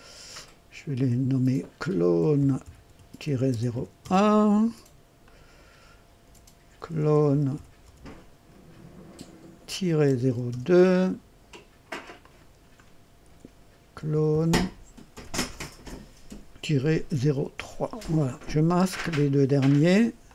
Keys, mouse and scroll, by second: 0.9 F2, 1.8-3.7 typing, 4.0 KP_Enter, 5.2 click, 6.2 F2, 6.6-8.3 typing, 9.7 -, 10.0 KP_0, 10.2 KP_2, 10.4 Return, 12.1 click, 13.2 F2, 13.7-15.1 typing, 16.7 -, 17.1 KP_0, 17.5 KP_Enter, 18.6 space, 20.2 click.